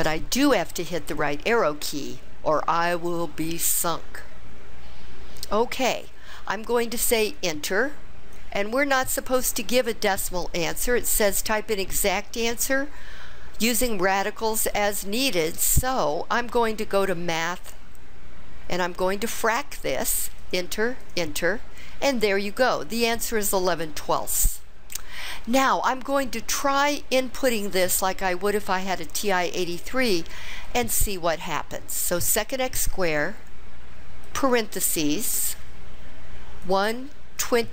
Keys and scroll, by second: 1.2 ), 7.4 Return, 20.5 Return, 21.1 Return, 34.4 (, 36.7 1, 37.5 2.